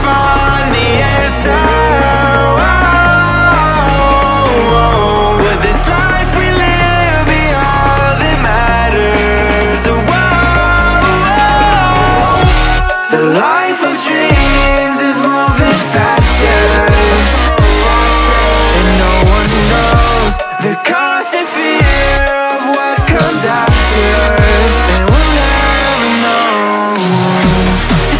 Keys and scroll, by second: 16.8 Return, 17.3 Down, 21.3 ctrl+v, 23.0 ctrl+z.